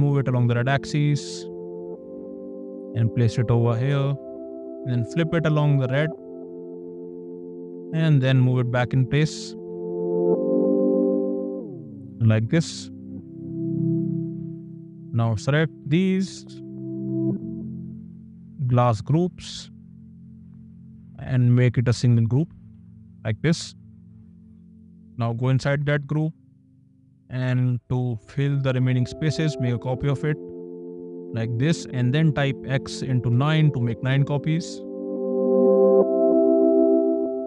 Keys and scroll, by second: 4.1 space, 7.9 m, 12.6 space, 22.9 ctrl+g, 27.5 m, 31.7 *, 33.6 Return, 34.0 space.